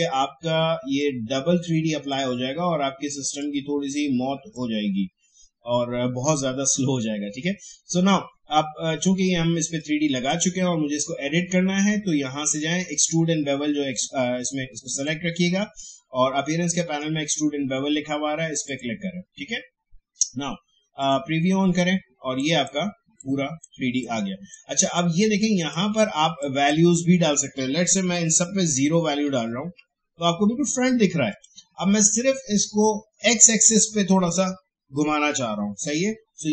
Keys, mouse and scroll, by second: 1.0-6.9 drag, 9.7-12.7 drag, 14.9 click, 19.1 click, 21.0-26.4 drag, 28.5 0, 28.8 Tab, 29.0 0, 29.2 Tab, 29.6 0, 29.7 Tab, 31.3 click.